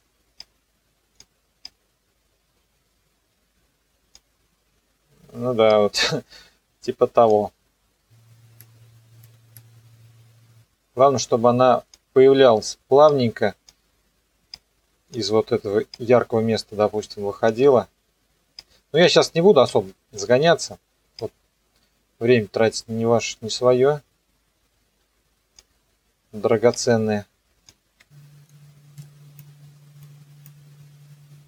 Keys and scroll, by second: 27.8 ctrl+z, 28.4 p, 29.0 u.